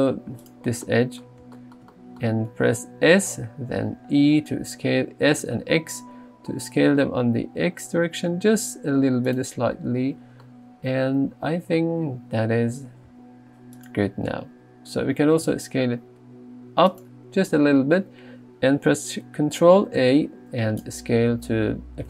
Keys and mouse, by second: 3.2 s, 3.9 x, 10.1 Tab, 12.8 g, 13.1 z, 15.5 s, 20.0 ctrl+a.